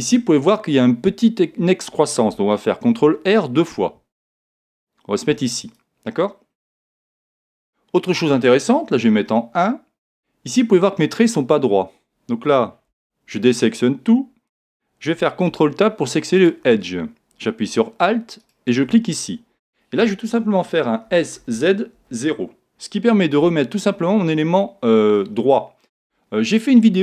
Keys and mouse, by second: 2.9 ctrl+r, 5.7 click, 7.5-9.0 middle drag, 9.0 KP_1, 10.7-12.9 middle drag, 12.9 a, 15.5 ctrl+Tab, 16.4 ctrl+Tab, 18.4 right click, 21.1 s.